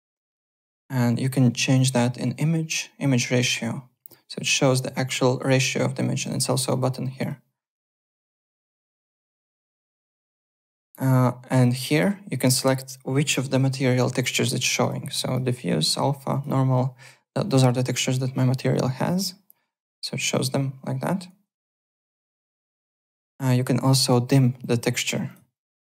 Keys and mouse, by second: 1.7 click, 3.4 click, 6.2 click, 8.6 alt+Tab, 10.8 alt+Tab, 11.8 click, 14.2 click, 14.8 click, 15.8 click, 19.0 click, 20.3 click, 21.8 click, 22.5 alt+Tab, 23.0 alt+click, 24.0 click, 24.6 click, 25.3 click.